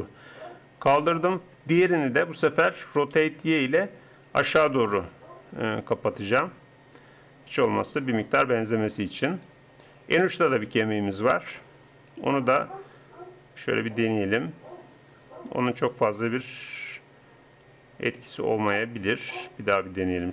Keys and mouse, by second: 1.8-3.7 drag, 3.1 r, 12.2 r.